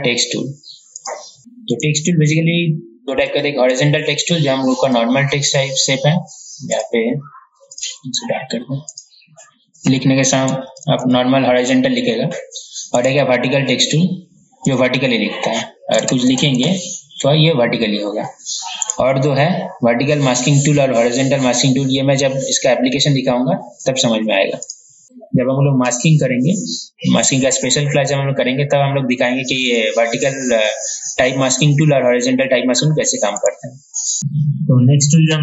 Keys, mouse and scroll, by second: 1.2 click, 2.0 right click, 3.5 click, 10.7-11.2 typing, 13.2 right click, 14.1 click, 15.9-18.4 typing, 19.0 right click, 24.8-25.5 typing, 24.8 click, 29.9 right click, 34.2 ctrl+alt+e.